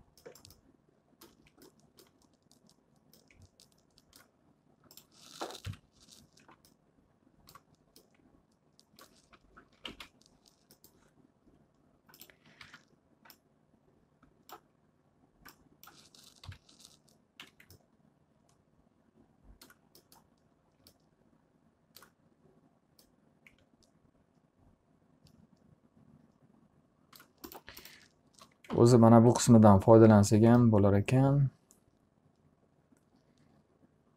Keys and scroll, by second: 5.8 Delete, 9.9 t, 10.4 z, 13.2 w, 17.0 p, 18.0 z, 28.8 alt+a.